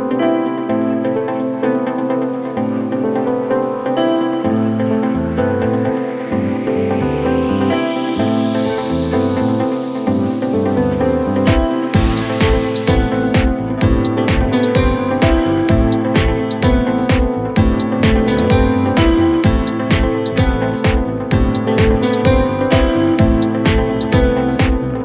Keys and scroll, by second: 2.0 c, 12.5 c.